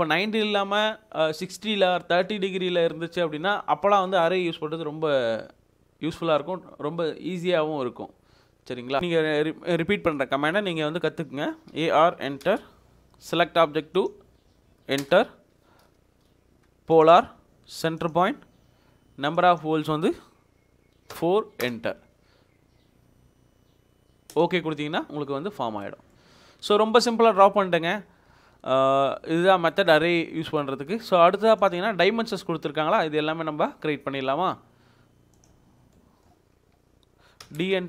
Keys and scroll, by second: 11.7-12.5 typing, 15.1 space, 21.1 4, 21.6 Return, 25.7 Escape, 37.4 d, 37.6 space.